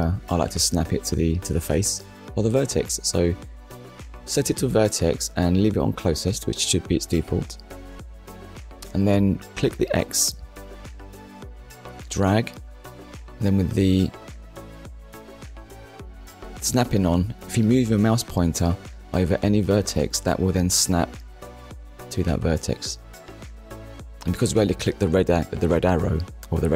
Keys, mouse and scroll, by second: 0.9 click, 2.3 click, 11.0 click, 12.4 click, 21.8 click, 25.1 click.